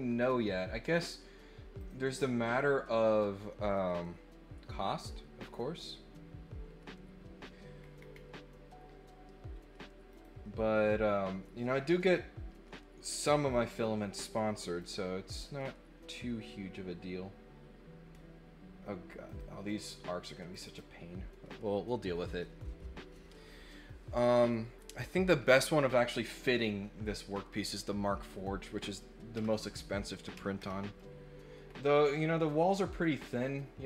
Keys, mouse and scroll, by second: 0.9 click, 1.7 click, 5.4 click, 7.7 scroll up 2, 7.9 scroll down 2, 8.1 middle click, 10.1 click, 14.7 click, 19.2 click, 20.5 click, 20.6 click, 26.8 middle click, 26.8 scroll up 1, 31.6 scroll up 1, 32.0 scroll down 1, 33.2 scroll down 1.